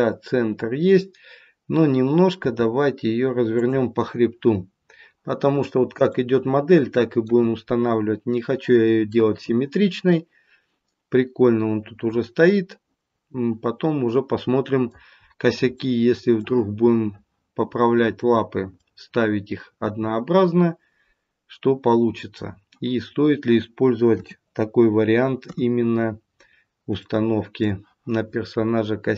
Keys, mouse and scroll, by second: 2.4 r, 6.1 middle click, 15.2-15.7 scroll up 2, 15.7 middle click, 24.0 KP_7, 25.3 KP_3, 26.2-26.7 scroll down 1, 27.0 shift+middle click.